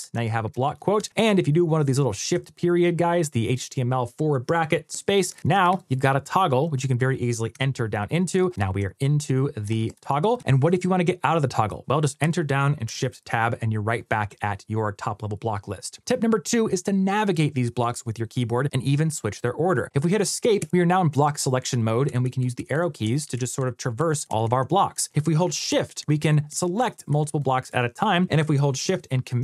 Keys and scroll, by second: 2.1 shift+., 5.3 shift+t, 8.2 shift+i, 12.7 shift+Tab, 25.8 shift+Up, 26.3 shift+Down, 26.9 shift+Up, 27.5 shift+Down.